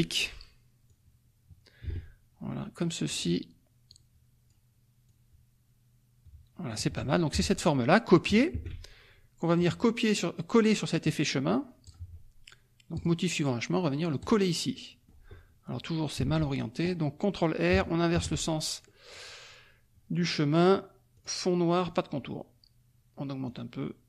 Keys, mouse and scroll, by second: 0.9-3.3 drag, 3.9 click, 5.0-6.8 drag, 7.3 F1, 8.5 ctrl+c, 9.5 click, 11.8 click, 13.0 click, 14.2 click, 14.7 middle click, 16.1 F2, 16.3 click, 18.1 shift+r, 18.8 click, 21.1 click, 21.8 click, 23.4-24.0 drag.